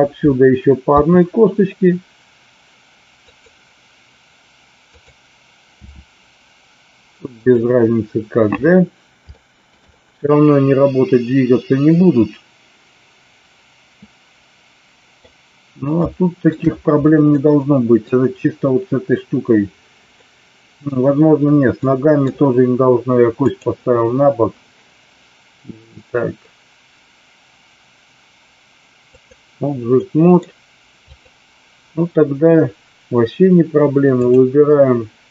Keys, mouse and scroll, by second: 0.9 e, 3.3 click, 4.8 click, 5.8 e, 7.3 click, 9.3 shift+middle click, 9.9-15.2 middle drag, 16.0 shift+middle click, 17.3 middle click, 20.2 middle click, 21.8 middle click, 23.5-29.4 drag, 29.9-30.4 middle drag, 31.0 click, 34.3-35.3 drag.